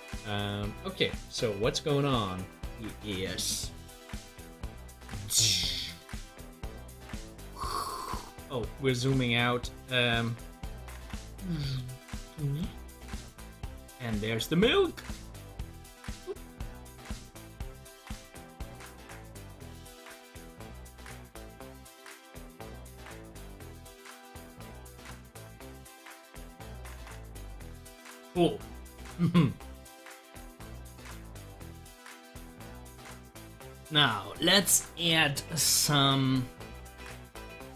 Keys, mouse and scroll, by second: 7.0 KP_Add, 7.1 Right, 7.7 KP_Add, 7.7 Right, 8.5 scroll down 1, 9.3 scroll up 1, 10.5 Right, 12.4 Right, 13.3 scroll up 1, 14.6 scroll up 1, 14.6 KP_Add, 14.7 Right, 15.5 KP_Add, 15.5 Right, 16.7 Right, 17.9 KP_Add, 19.9 Right, 20.2 KP_Add, 20.2 Right, 21.8 KP_Add, 21.9 Right, 23.7 scroll down 1, 24.1 Right, 24.3 KP_Add, 24.4 Right, 27.2 KP_Add, 27.3 Right, 28.1 scroll up 1, 28.7-31.6 middle drag, 32.2 click.